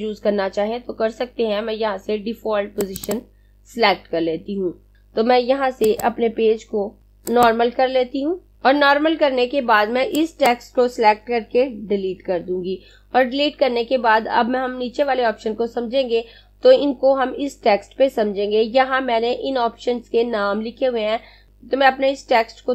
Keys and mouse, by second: 2.3 click, 6.0 click, 7.4 click, 10.2 click, 12.1 Delete.